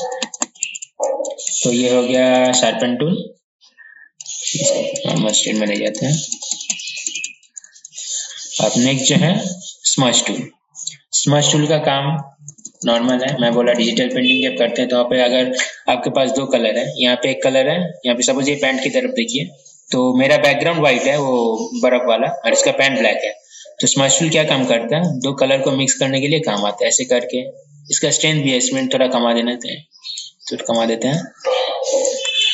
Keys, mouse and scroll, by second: 1.1 typing, 4.5 ctrl+z, 4.8-7.7 typing, 9.0 right click, 10.0-32.5 drag.